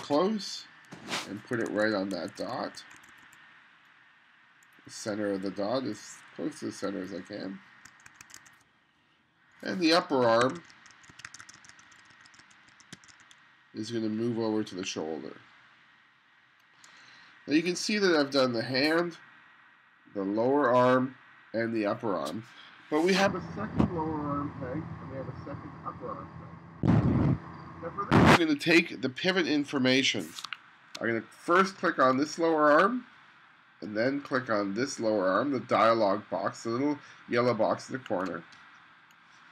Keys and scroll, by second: 1.6 3, 2.1 2, 8.0 1, 10.5 1, 29.5 2, 30.4 space.